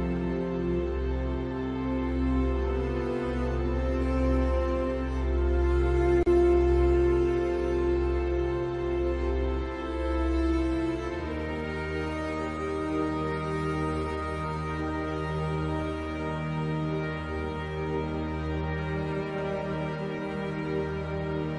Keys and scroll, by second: 18.2 ctrl+alt+z.